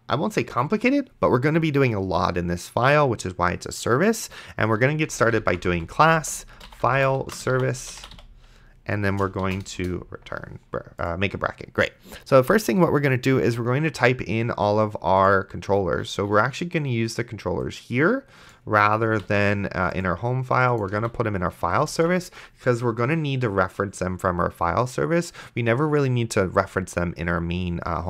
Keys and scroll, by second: 5.0-9.7 typing, 9.8 Return, 19.4 ctrl+x, 21.2 ctrl+v, 22.2 ctrl+s.